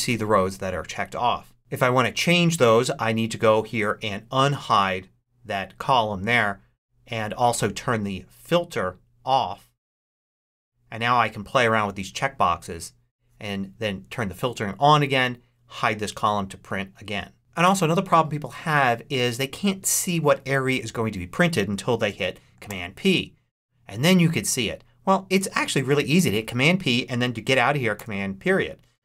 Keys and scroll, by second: 22.6 super+p, 27.8 super+..